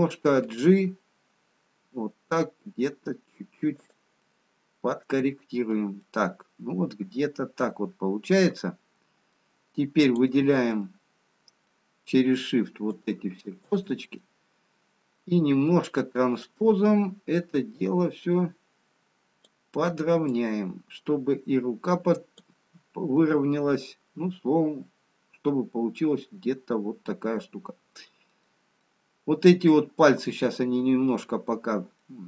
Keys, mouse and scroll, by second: 0.9 g, 4.7 middle click, 5.9 middle click, 8.7 middle click, 10.7 click, 10.7 middle click, 13.7 shift+click, 14.0 middle click, 16.5 click, 17.6 click, 22.6 click, 23.2 middle click, 28.9 middle click, 28.9 scroll up 1.